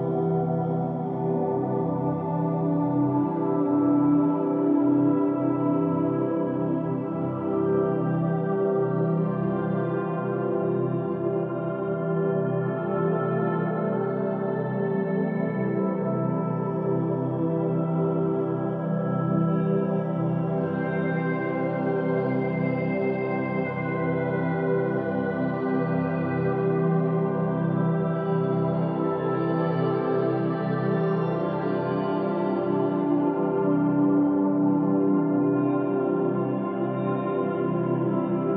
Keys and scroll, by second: 19.9-22.0 typing.